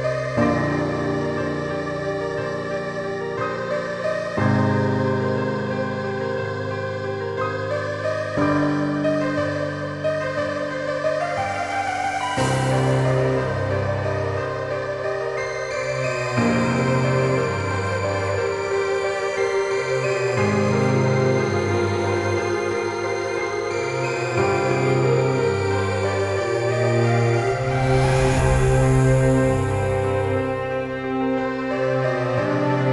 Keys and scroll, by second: 30.0-31.9 typing.